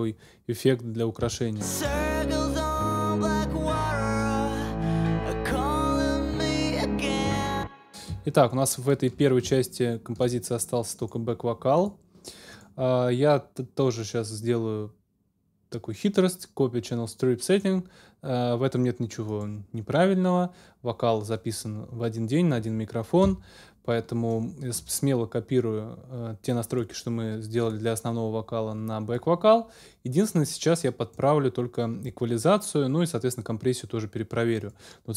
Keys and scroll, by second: 1.2 space, 1.8 super+space, 2.2 super+s, 6.4 super+s, 7.3 super+space, 8.1 ctrl+space.